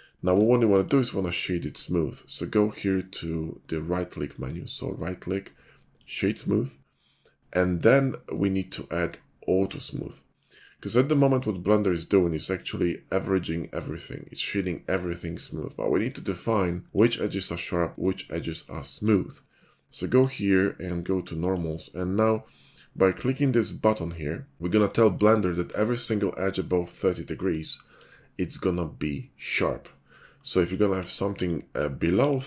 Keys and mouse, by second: 0.3-0.9 middle drag, 1.4 right click, 8.2-10.4 middle drag, 11.0-14.5 middle drag, 15.3-18.6 middle drag, 19.1-20.0 middle drag, 20.1-21.3 drag, 25.2-25.7 drag, 25.7-26.5 middle drag, 26.9 shift+middle drag, 27.5-28.1 shift+middle drag, 28.1-29.4 drag, 30.5 middle click, 30.8 Tab, 31.4 middle click, 32.1 ctrl+b.